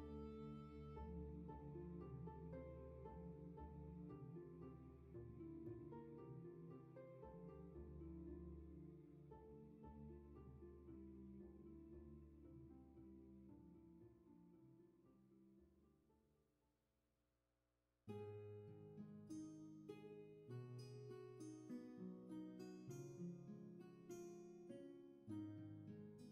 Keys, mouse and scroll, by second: 0.8 scroll up 1, 18.0 scroll down 1, 18.8 space, 21.4 scroll up 1.